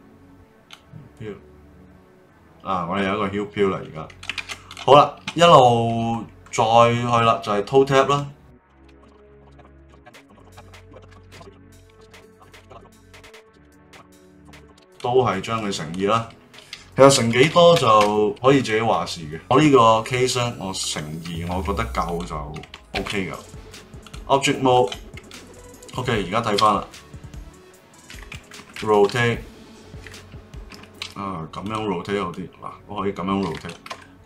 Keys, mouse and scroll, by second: 0.7-3.7 drag, 4.4 ctrl+z, 4.7 click, 6.1-8.1 middle drag, 8.1 right click, 9.1 click, 9.3 right click, 10.9 BackSpace, 11.0 BackSpace, 11.7 ctrl+Tab, 12.1 click, 12.5 click, 12.7 right click, 13.0 click, 13.1 ctrl+Tab, 13.5 right click, 19.3 click, 20.8 click, 21.5 Tab, 22.0 click, 22.9 ctrl+Tab, 24.7 click, 25.3-26.5 middle drag, 26.5 g, 29.1 r, 31.6-33.9 drag, 33.9 Escape.